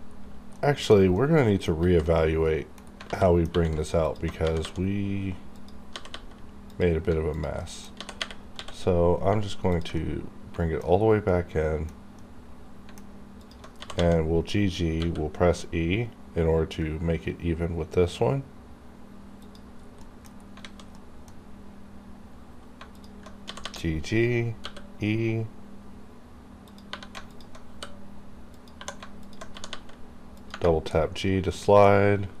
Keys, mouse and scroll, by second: 0.0 scroll up 1, 0.6 middle click, 0.9 scroll down 1, 1.1 middle click, 1.8 alt+z, 2.2 middle click, 2.9 scroll up 1, 3.1 alt+z, 3.2 alt+middle click, 3.5 scroll up 1, 4.1 alt+click, 4.4 g, 4.6 g, 5.6 click, 5.9 g, 6.1 g, 6.7 click, 6.7 click, 7.3 alt+click, 7.6 alt+middle click, 8.0 g, 9.6 ctrl+click, 10.0 ctrl+middle click, 10.9-11.3 scroll down 1, 11.3-13.4 middle drag, 13.4 alt+click, 13.7 g, 14.9 e, 19.4 e, 19.4 click, 19.7 scroll down 1, 20.0 middle click, 20.3 scroll up 1, 20.6 alt+a, 20.9 middle click, 22.1 scroll up 1, 22.9 alt+click, 23.5 g, 24.6 e, 26.9 3, 27.3 alt+click, 27.3 alt+click, 27.7 e, 28.5 click, 28.8 2, 29.2 alt+click, 29.2 alt+click, 29.5 g, 30.4 click, 30.7 scroll down 1, 30.9-32.4 middle drag.